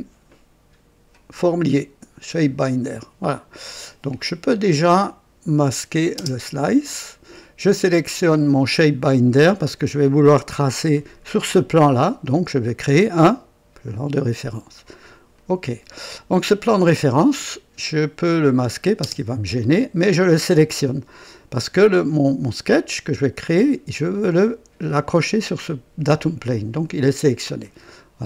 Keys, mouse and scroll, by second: 5.4 click, 6.1 space, 7.8 click, 13.8 click, 15.3 click, 16.6-17.9 drag, 18.5 click, 19.0 space, 20.6 click, 27.6 click.